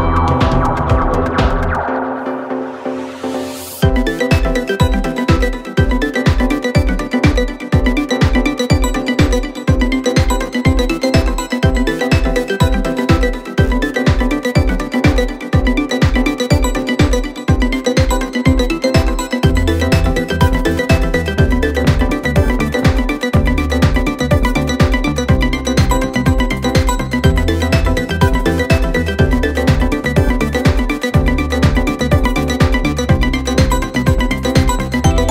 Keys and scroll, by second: 3.2 3, 10.1 4, 11.8 2, 13.7 ctrl+z, 22.6 ctrl+z, 30.5 4, 31.1 3.